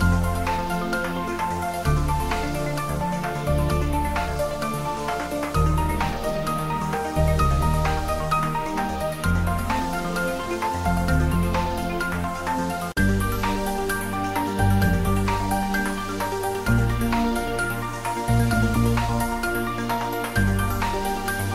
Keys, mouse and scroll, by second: 1.2 click, 2.4 g, 4.1 click, 4.3 shift+middle click, 5.1 shift+middle click, 6.1 Tab, 6.8 s, 7.6 click, 7.7 Tab, 8.5 ctrl+r, 8.7 click, 9.2 s, 10.4 click, 10.8-12.3 shift+middle drag, 12.3 click, 13.2 g, 14.4 click, 14.8 s, 16.9 click, 17.4 ctrl+r, 18.0 click, 19.4 s, 20.5 click, 20.6 Tab.